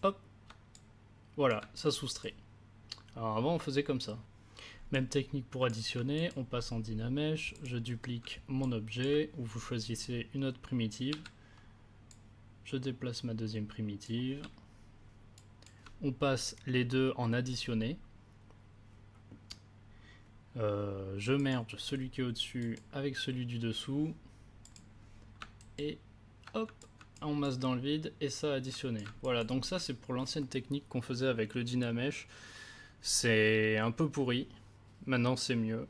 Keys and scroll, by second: 11.1 w.